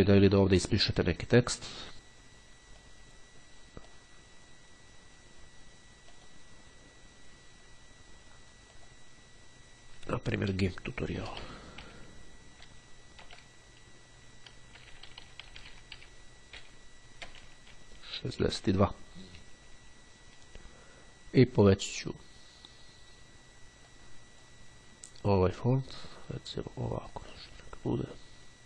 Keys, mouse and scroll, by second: 3.1 click, 4.0-5.1 drag, 6.3 click, 8.7 click, 11.1-13.4 typing, 14.8-16.8 typing, 18.1 6, 21.4 click, 24.0-25.1 drag, 25.5-26.5 drag, 26.9 click.